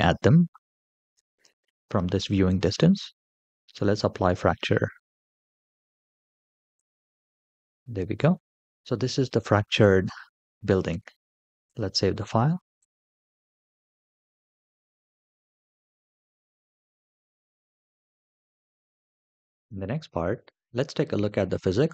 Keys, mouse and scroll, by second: 6.5 click, 7.2 scroll up 3, 7.8-8.4 scroll down 1, 8.4 middle drag, 11.4-12.8 drag, 19.0 shift+middle click, 19.6 space.